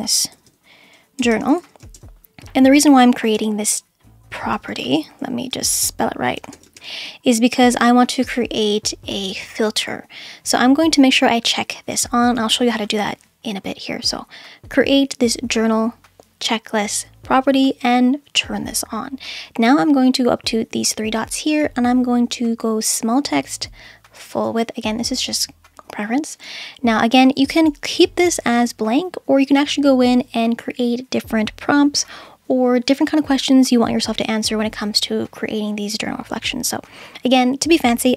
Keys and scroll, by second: 0.3-2.3 typing, 3.3 l, 5.3-7.2 typing, 7.9 Return.